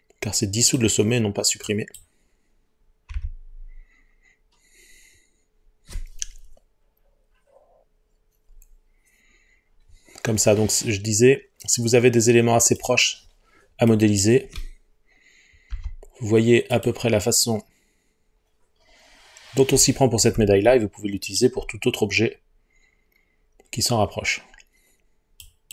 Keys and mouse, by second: 3.2 g, 12.8 click, 13.9 click, 15.7 Delete.